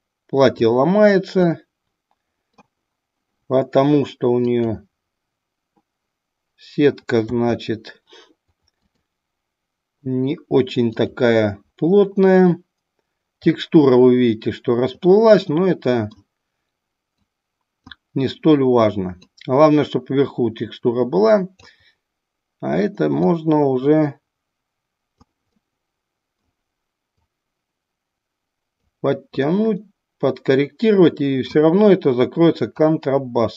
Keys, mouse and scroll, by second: 1.5-2.6 middle drag, 7.2 a, 11.3 click, 13.5-15.0 middle drag, 15.6 middle click, 17.2 click, 19.2-21.7 drag, 23.2-25.5 drag, 25.7 middle click, 27.4-29.1 drag, 29.5-31.5 middle drag, 32.7-33.5 drag.